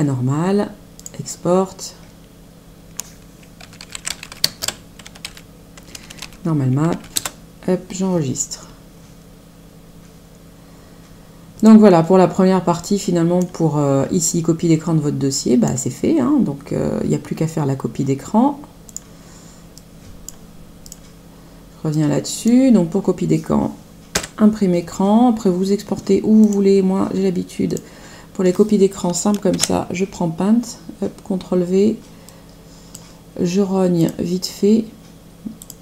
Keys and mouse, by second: 0.9 click, 3.3-6.8 typing, 7.1 Return, 11.5 click, 12.7 click, 14.2 click, 19.1 click, 20.9 click, 21.9 click, 24.1 Print, 26.3 click, 27.7 click, 29.5 ctrl+v, 32.2 click, 34.0 click, 35.5 click.